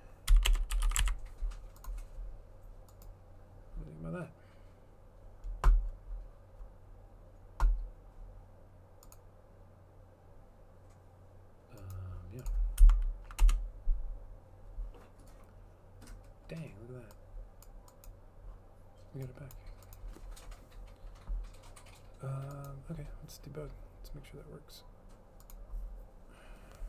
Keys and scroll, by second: 0.0-1.5 typing, 13.5 Up.